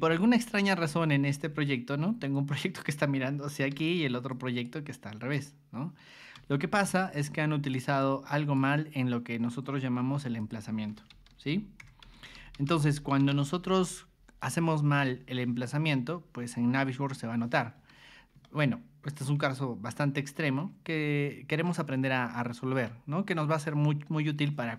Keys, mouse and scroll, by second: 0.7 y, 1.3 click, 2.3 click, 3.7 g, 4.3 click, 4.9 click, 6.3 r, 7.0 click, 8.0 click, 10.4 click, 10.9-13.9 typing, 14.4 click, 17.7 Escape, 18.4-19.4 shift+middle drag, 19.9-20.4 scroll up 4, 20.6-21.6 shift+middle drag, 21.9 middle click, 23.6 middle click.